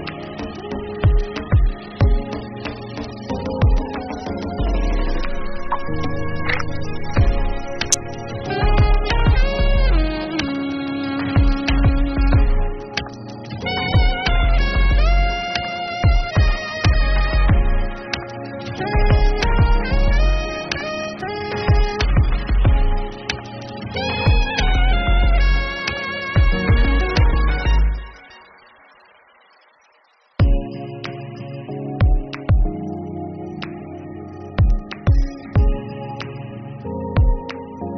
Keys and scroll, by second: 26.6 ctrl+s, 30.9 ctrl+s, 36.8-37.9 typing.